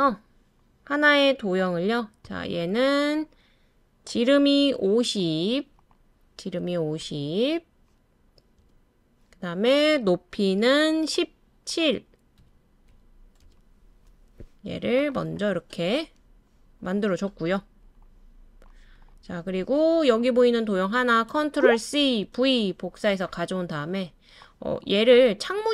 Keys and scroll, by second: 6.6-7.0 typing, 8.6 Return, 8.7 typing, 12.4-13.4 typing, 21.8 super+c, 22.3 super+v.